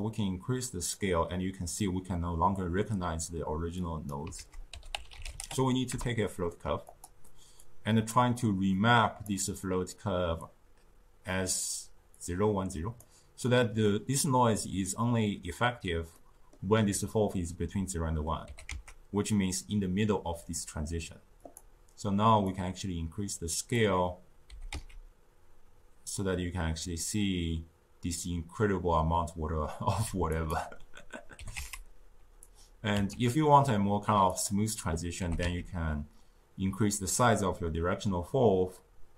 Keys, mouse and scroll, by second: 3.7 click, 4.2 ctrl+a, 7.5-15.1 drag, 16.0-18.4 middle drag, 18.4 g, 22.4-24.4 drag, 24.4 g, 31.3 g, 32.9 s, 35.1 g.